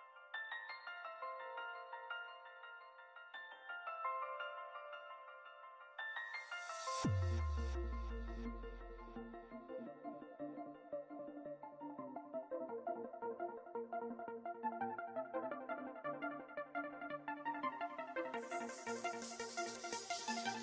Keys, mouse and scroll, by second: 1.3-2.0 scroll up 4, 2.0 click, 2.4-4.2 middle drag, 4.2 click, 4.7-5.8 scroll down 12, 6.5-9.7 drag, 9.7-10.2 scroll down 1, 11.2-12.2 scroll down 1, 12.2-12.6 scroll down 4, 12.6 click, 13.9-14.5 scroll down 2, 15.5 click, 17.0-18.0 middle drag, 18.0 scroll down 2, 18.5-20.0 middle drag, 20.0-20.6 scroll up 6.